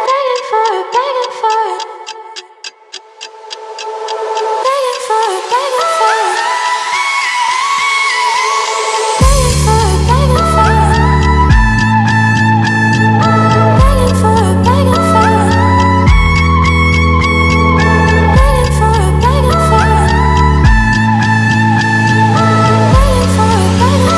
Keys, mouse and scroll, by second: 9.6 right click, 10.5-18.7 drag, 19.1 BackSpace, 20.9-24.1 drag.